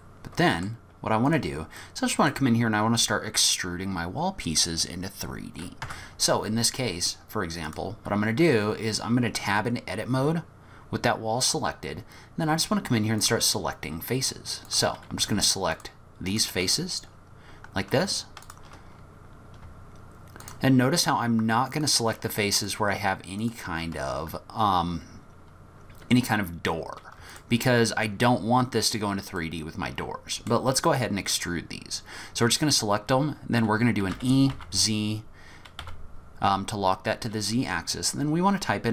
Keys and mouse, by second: 0.0-0.8 middle drag, 1.8 click, 5.8 Tab, 13.2 click, 14.7 click, 15.7 shift+click, 16.3 shift+click, 20.4 shift+click, 22.6 shift+click, 23.4 shift+click, 27.3 shift+click, 29.5-30.5 middle drag, 30.9 middle click, 34.1 e.